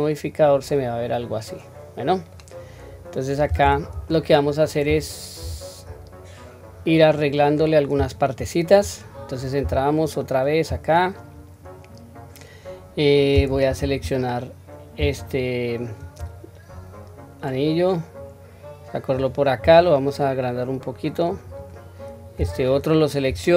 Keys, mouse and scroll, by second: 0.1-2.3 middle drag, 4.0-4.6 scroll down 2, 4.4-5.4 scroll up 3, 5.4 Tab, 6.4 scroll down 1, 7.1 middle click, 8.4 scroll up 1, 9.5 scroll up 1, 9.6 Tab, 15.3 alt+click, 16.7-19.1 drag, 19.6 s, 22.5 alt+click.